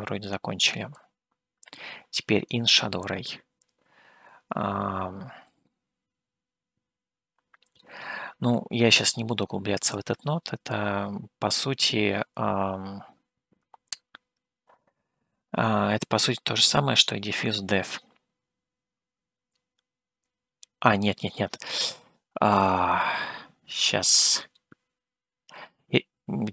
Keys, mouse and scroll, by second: 0.9-2.5 drag, 3.9-4.8 scroll up 3, 5.3-5.6 scroll up 1, 5.6-7.8 middle drag.